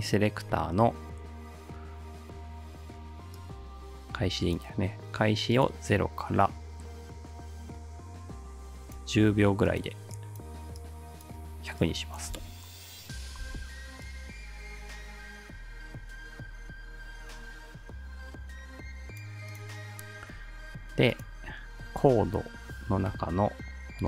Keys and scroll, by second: 12.4 space, 13.4 space.